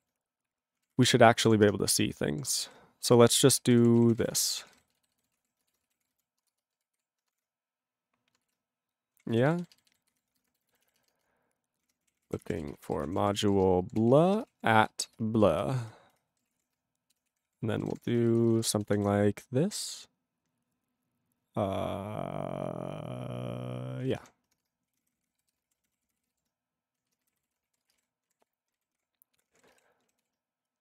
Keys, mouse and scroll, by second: 0.6-7.4 typing, 8.6 ctrl+e, 11.7-15.4 typing, 15.7 alt+f, 15.8 alt+f, 16.1 alt+f, 16.3 alt+b, 16.6-19.0 typing, 24.1-28.1 typing, 28.5 ctrl+s, 28.7 ctrl+n, 28.8 ctrl+n, 29.0 ctrl+l, 29.4 ctrl+p, 29.5 ctrl+p, 29.5 ctrl+a, 29.7 ctrl+space, 29.7 ctrl+e, 29.8 ctrl+g, 30.2 ctrl+s.